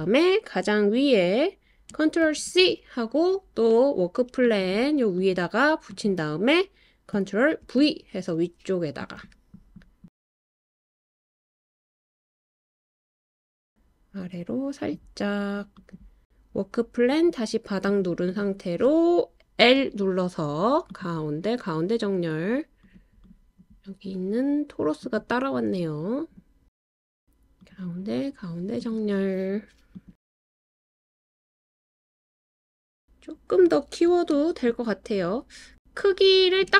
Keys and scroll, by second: 2.2 super+c, 7.6 super+v, 19.5 i, 27.6 i.